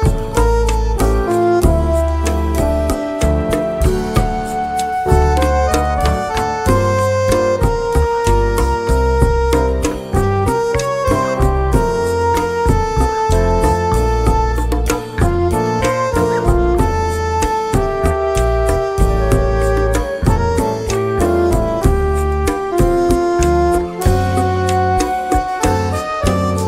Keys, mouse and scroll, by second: 0.8 click, 1.8 click, 3.8 KP_Subtract, 8.7 click, 10.5 click, 12.6 click, 14.3 click, 17.8 click, 23.0 click, 25.3 ctrl+z.